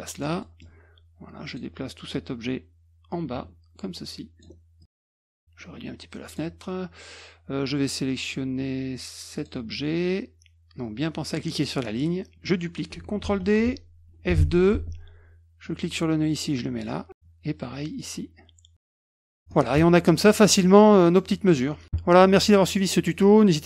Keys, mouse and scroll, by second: 0.4 scroll up 1, 0.4 middle click, 1.4 click, 3.1-4.4 ctrl+drag, 4.8 click, 5.2 middle click, 5.5 click, 9.3 click, 11.5 click, 13.2 ctrl+d, 14.5 F2, 15.6-17.1 drag, 17.9 click, 18.5 click, 19.4 click, 21.0 middle click, 21.5 middle click.